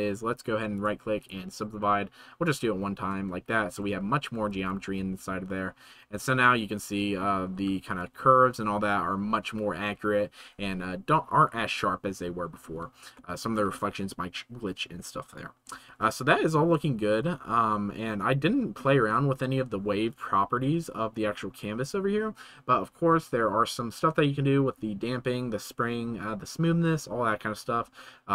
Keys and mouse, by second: 0.7 middle click, 3.1 Tab, 4.9 space, 5.9 space, 6.8-7.2 shift+middle drag, 13.1-13.6 shift+middle drag, 16.4 shift+middle click, 16.6 right click, 21.7 middle click.